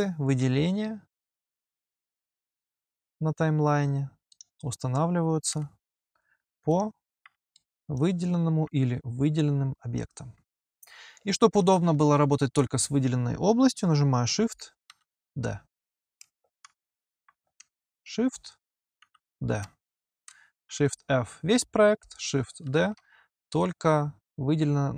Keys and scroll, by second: 5.3 p, 14.7 shift+d, 16.7 h, 18.8 shift+d, 20.6 shift+f, 22.5 shift+d.